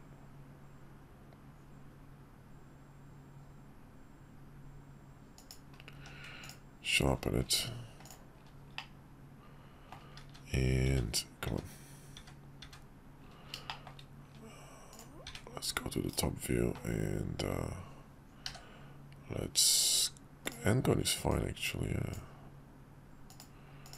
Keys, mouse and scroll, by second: 5.9 q, 8.0 click, 8.8-10.0 drag, 10.3-12.6 typing, 13.7 shift+drag, 14.9-15.2 drag, 15.2 `, 16.1 /, 18.5 d, 21.3-22.2 drag.